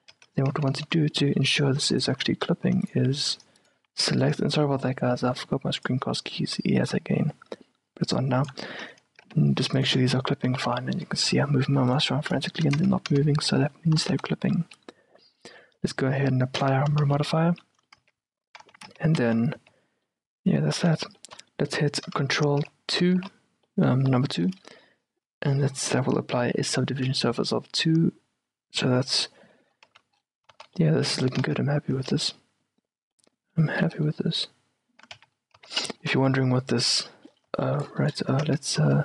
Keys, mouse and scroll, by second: 0.0-2.1 middle drag, 0.2 Tab, 0.6 z, 0.9 z, 2.1 click, 2.1 right click, 2.2 a, 2.8 middle click, 2.8 a, 3.2-4.8 right drag, 3.8 a, 4.8 middle click, 5.4 right click, 6.9-8.9 drag, 9.3 g, 10.5 g, 12.5-16.3 middle drag, 12.8 Tab, 13.2 z, 14.1 z, 16.6 click, 17.1 z, 17.5-18.7 middle drag, 18.1 Tab, 18.7 a, 19.0 Tab, 19.3 z, 19.7 z, 20.8 z, 21.3-23.6 middle drag, 23.3 ctrl+2, 23.9-30.0 middle drag, 30.0 z, 30.2-35.0 middle drag, 30.6 z, 31.5 z, 32.0 z, 35.3 q, 35.7 z, 36.3 middle click, 37.4-39.0 middle drag, 38.6 Tab, 38.9 z.